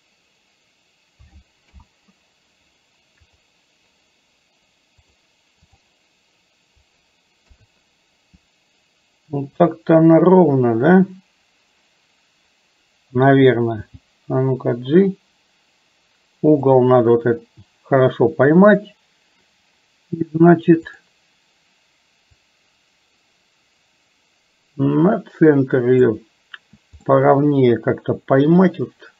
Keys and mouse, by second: 1.7 KP_7, 5.1 click, 7.5 KP_3, 9.6 click, 13.7 g, 22.7-26.2 drag, 27.2-29.1 middle drag.